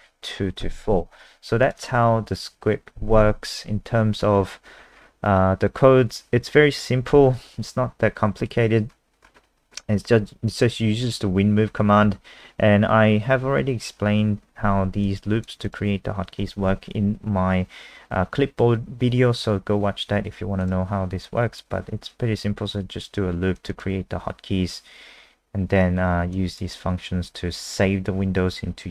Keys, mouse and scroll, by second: 1.7 click, 1.8 click, 2.3 click, 4.3-5.0 scroll down 6, 6.2 scroll down 2, 6.8-7.9 scroll down 1, 7.9-8.9 scroll down 3, 8.9-10.6 scroll up 7, 10.6 click, 12.0-13.0 scroll up 5, 13.0 scroll up 1, 15.1 click, 23.7 click, 26.3 click, 28.1-28.7 scroll down 4.